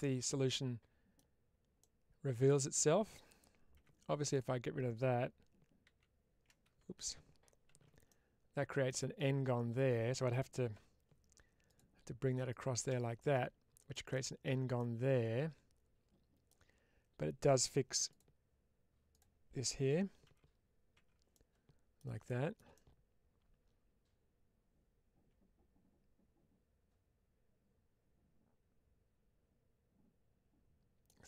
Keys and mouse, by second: 1.7 middle click, 3.6 2, 4.2 click, 6.4 ctrl+c, 7.6 ctrl+x, 7.9 middle click, 10.6 k, 13.8 middle click, 14.6-16.3 middle drag, 17.9 1, 18.0 click, 19.0 click, 20.2 4, 21.2 middle click, 22.6-30.9 middle drag.